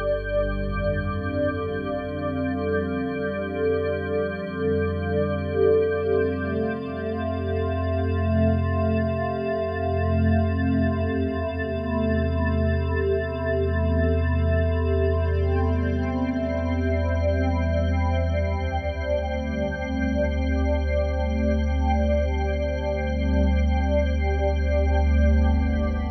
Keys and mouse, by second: 2.2 click, 2.8 click, 4.3 click, 4.8 click, 5.7 click, 7.3 click, 8.8-10.1 drag, 10.9-12.1 drag, 14.7-16.0 drag, 18.4-22.5 drag, 23.5-26.1 drag.